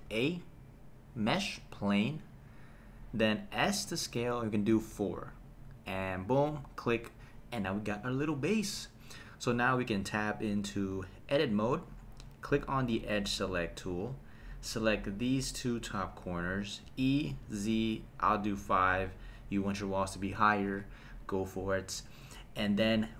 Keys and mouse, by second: 0.1 shift+a, 3.6 s, 4.8 KP_4, 6.8 click, 9.0 middle click, 10.9 Tab, 12.9 click, 14.1 click, 14.8 click, 16.8 e, 17.4 z, 18.6 KP_5, 19.6 click.